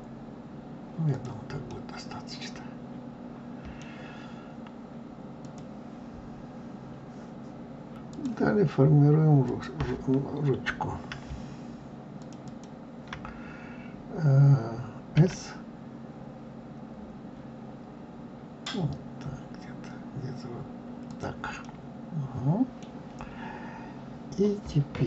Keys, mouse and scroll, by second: 1.7-4.7 middle drag, 8.1 click, 9.3 click, 12.1 shift+click, 12.4 shift+click, 15.1 s, 21.5-23.5 middle drag, 23.5-24.7 scroll up 1.